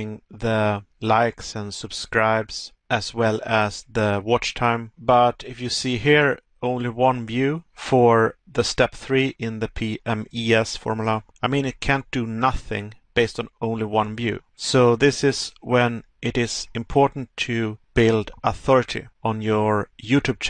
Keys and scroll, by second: 20.2 Pause.